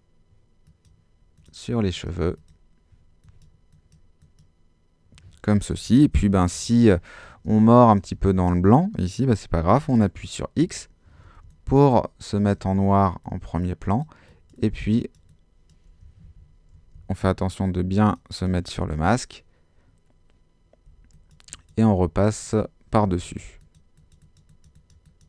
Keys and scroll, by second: 7.5 super+space, 10.6 x, 11.4 ctrl+x, 16.2 super+z, 16.7 alt+super+z, 20.9 x, 23.1 x.